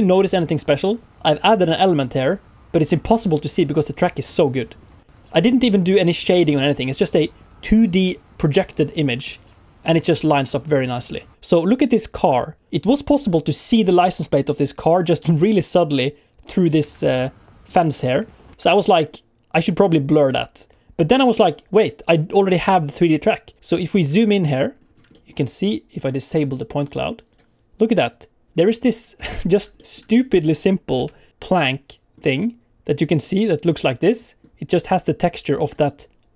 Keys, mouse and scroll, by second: 23.8-24.2 scroll up 5, 24.2 shift+middle click, 24.8 scroll up 2, 25.1 shift+middle click, 27.2 click, 28.1 click, 28.5 scroll up 2, 28.9 shift+middle click, 29.4 scroll up 2, 29.7 shift+middle click, 30.0-30.9 scroll down 1, 30.9 KP_Decimal, 31.6 middle click, 33.2 middle click.